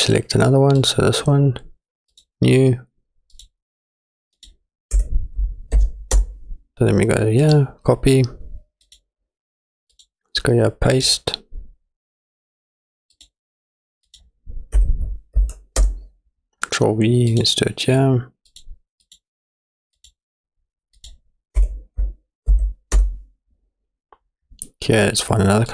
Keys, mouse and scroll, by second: 0.8 click, 2.1 click, 3.3 click, 9.9 click, 10.9 click, 13.1 click, 17.3 click, 18.5 click, 19.0 click, 20.1 click, 23.1 middle click.